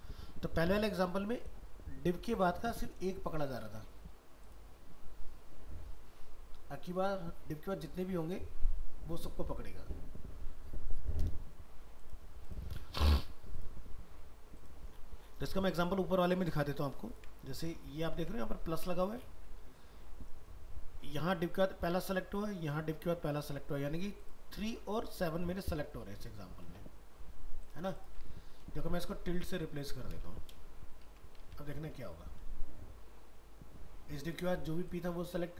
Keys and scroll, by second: 1.3 alt+Tab, 18.1 ctrl+s, 26.1 alt+Tab, 31.1 ctrl+s, 31.5 alt+Tab.